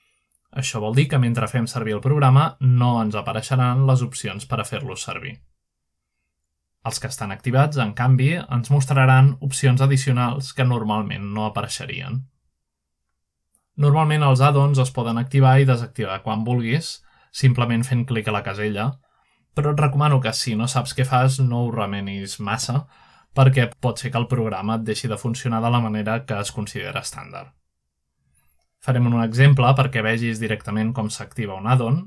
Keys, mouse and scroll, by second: 0.0 click, 1.0 click, 1.3-1.9 drag, 2.8-5.3 scroll down 1, 6.5-7.3 scroll down 1, 7.7-8.5 drag, 11.1-11.9 drag, 16.1 alt+Tab, 17.5-18.7 alt+drag, 18.7 alt+º, 21.0-23.7 scroll up 1, 25.1 click, 27.9 scroll up 1, 28.4 scroll down 1, 29.3 scroll up 1, 29.9-30.4 scroll up 1.